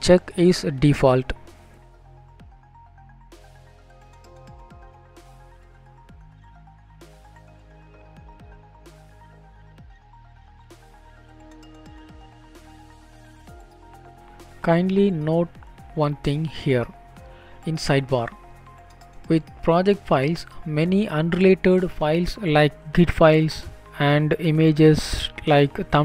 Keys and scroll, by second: 2.9 BackSpace, 3.5 ctrl+space, 7.6 ctrl+s, 8.0 End, 24.5 Up.